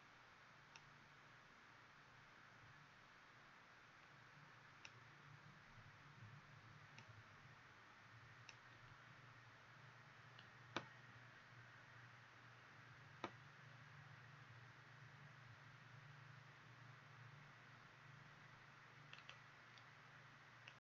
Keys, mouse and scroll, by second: 19.2 click.